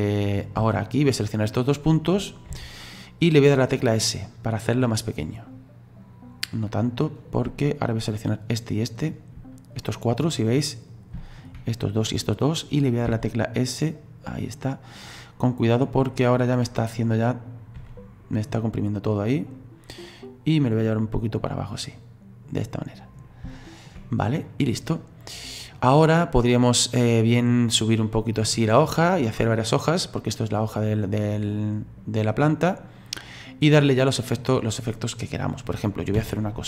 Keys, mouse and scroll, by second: 0.4 right click, 1.6 shift+right click, 2.5 s, 8.0 shift+right click, 9.0 shift+right click, 9.8 middle click, 10.4-10.9 scroll up 4, 10.9 scroll down 2, 11.2-13.1 shift+middle drag, 13.1 s, 16.2 middle click, 16.7-17.8 scroll down 2, 17.8 s, 20.6-23.5 drag, 23.5-26.6 shift+middle drag, 26.6 right click, 27.7 click, 29.0-31.5 middle drag, 31.5 click, 32.4-34.6 middle drag, 34.6-36.2 scroll down 4, 36.2 ctrl+z.